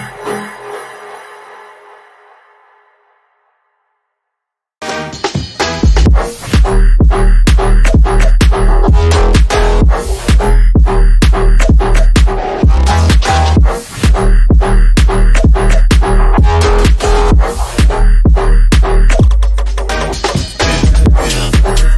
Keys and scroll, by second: 5.3 F3, 5.9 Escape, 7.4 F3, 8.5 F3, 17.6 F3, 18.2 Escape, 19.6 shift+F2.